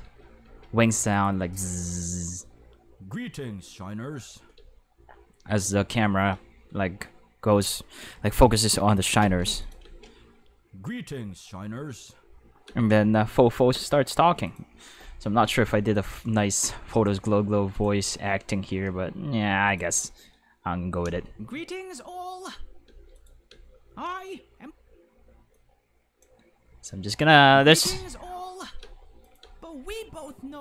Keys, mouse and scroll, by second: 0.0 space, 0.4 space, 1.1 click, 1.4 space, 4.5 space, 9.2 space, 9.5 space, 9.6 click, 9.8 space, 12.7 space, 14.5 click, 16.0 click, 16.5 click, 17.8 click, 19.7 click, 21.0 space, 22.8 space, 23.2 click, 23.5 space, 24.6 space, 25.5 click, 27.1 click, 27.4 space, 28.8 space, 29.2 click, 29.4 space.